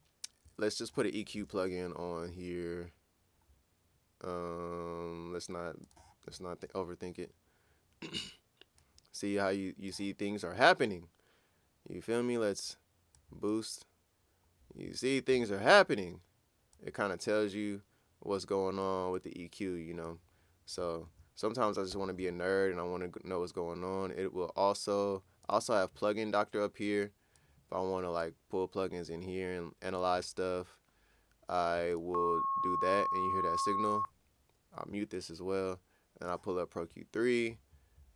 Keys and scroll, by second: 21.9 ctrl+super+w.